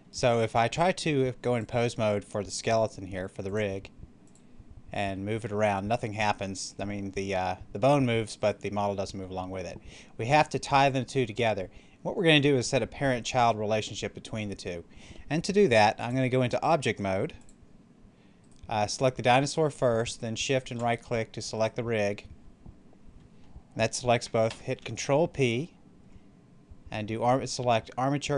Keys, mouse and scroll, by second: 1.4 click, 4.9 r, 8.3 right click, 15.9 click, 18.3 right click, 21.5 right click, 24.4 ctrl+p.